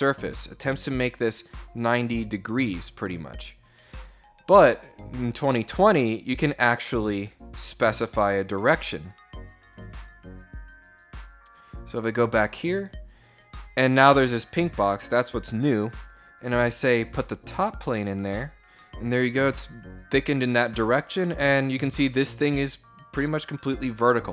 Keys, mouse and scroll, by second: 3.0-3.9 scroll up 6, 4.1 scroll down 2, 4.5 scroll up 2, 4.7 scroll down 2, 5.2 scroll up 2, 5.7 scroll down 2, 6.8 click, 9.3 click, 12.3 click, 14.0 click, 16.6 click, 19.8 middle click, 19.8 scroll down 1.